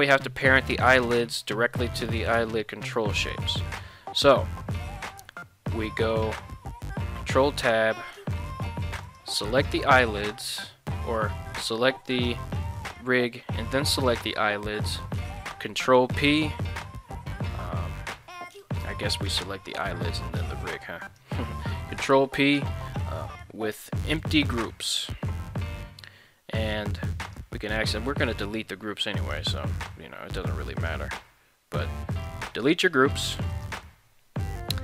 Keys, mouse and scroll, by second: 6.0 ctrl+Tab, 7.7 z, 8.5 right click, 9.0 right click, 9.5 right click, 11.0 z, 12.1 right click, 12.8 z, 13.9 shift+right click, 15.6 ctrl+p, 18.8 right click, 19.2 right click, 21.0 shift+right click, 22.1 ctrl+p, 27.2 click, 29.1 right click, 32.1-33.7 drag.